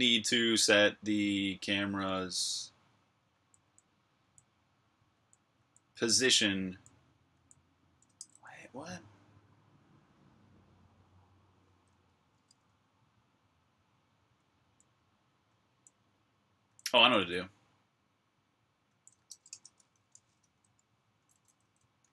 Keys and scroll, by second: 3.2-8.1 typing, 14.2-15.5 typing, 16.6-17.0 typing, 18.5-22.1 typing.